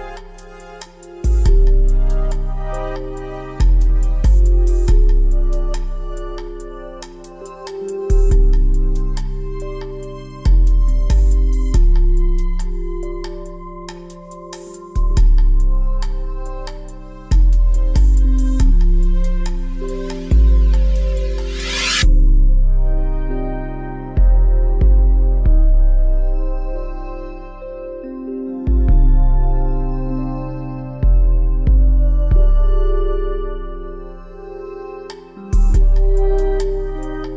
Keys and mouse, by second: 0.1 shift+d, 2.8 z, 3.8 g, 5.6 z, 8.1 g, 10.4 z, 11.3 shift+d, 13.1 click, 14.0 g, 16.3 z, 16.7-19.4 drag, 20.1 z, 20.6 z, 21.4 a, 24.9 ctrl+p, 27.4 a, 28.3 z, 31.4 g, 33.6 g, 36.0 a.